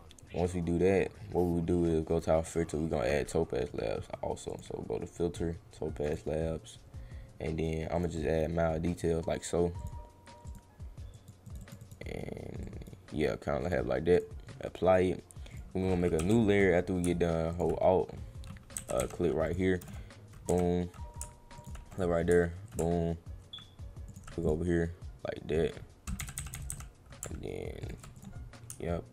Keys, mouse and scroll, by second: 4.5 click, 6.0 click, 7.9 click, 9.8 click, 10.4 click, 11.1 click, 11.5 click, 11.6 click, 11.8 click, 12.6 click, 13.6 click, 14.1 click, 15.5 click, 17.5 alt+click, 19.4 click, 21.6 alt+click, 21.9 click, 24.0 alt+click, 24.4 click, 27.8 alt+click, 28.1 click.